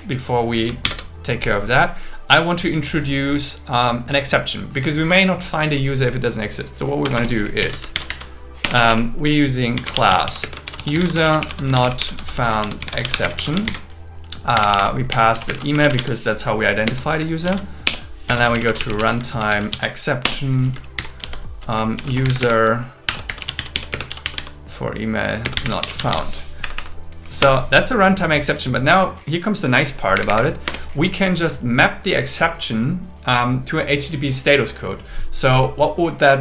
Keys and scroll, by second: 0.9 super+7, 7.1 Return, 7.6 alt+l, 8.0 shift+r, 8.6 BackSpace, 10.4-12.4 typing, 13.7 shift+8, 15.5 shift+space, 15.5 shift+s, 16.4 Right, 16.9-18.4 typing, 19.5 shift+e, 20.2 Return, 20.7-23.9 typing, 25.4 space, 26.7 Right, 27.4 Return, 30.2 Up, 30.6 Return.